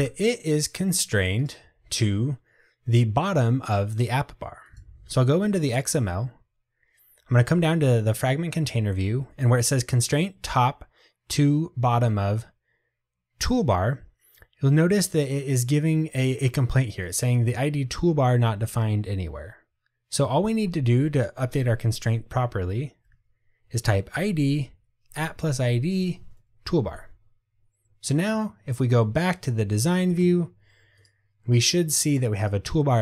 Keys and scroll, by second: 24.3 Return.